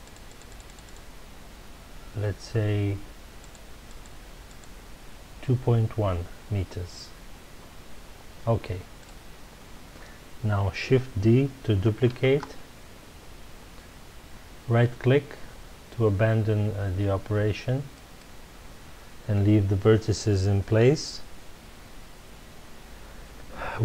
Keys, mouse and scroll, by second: 9.0 click, 12.1 shift+d, 18.2 right click.